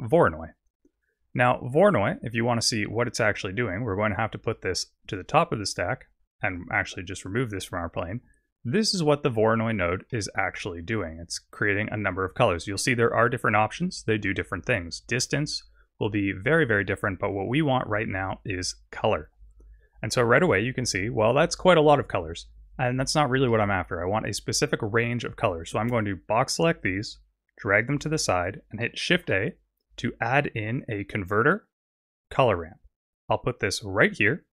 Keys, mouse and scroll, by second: 5.1 click, 6.5 click, 7.3 click, 9.7-10.1 scroll down 1, 10.1 middle click, 14.4 click, 17.3 click, 19.3 scroll down 3, 23.5 middle click, 24.2 click, 26.8 click, 28.3 click, 29.2 shift+a.